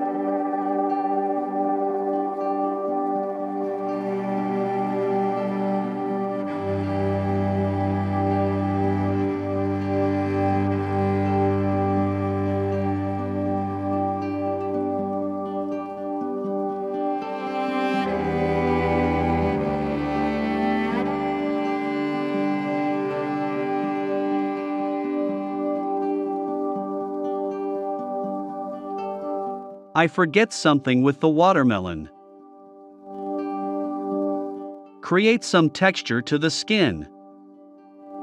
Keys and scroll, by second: 0.8 BackSpace, 21.9 i, 23.8 v, 25.8 i, 26.7 v.